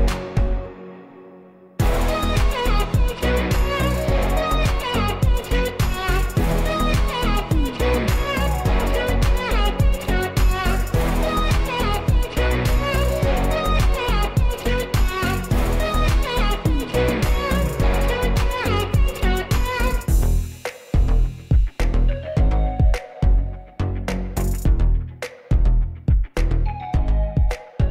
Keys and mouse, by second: 0.0 click, 4.6 ctrl+j, 5.6 Tab, 6.0-6.3 middle drag, 7.1 click, 7.7 g, 8.8 click, 8.8 z, 9.7 g, 11.2 click, 11.2 z, 11.7 g, 11.7 z, 13.0 click, 13.2 middle click, 14.9 g, 15.6 click, 16.2 click, 16.6 g, 18.2-19.2 middle drag, 19.4 click, 19.8 Tab, 20.5-21.3 middle drag, 21.4 shift+middle drag, 21.9-23.4 middle drag, 23.6-27.9 shift+middle drag.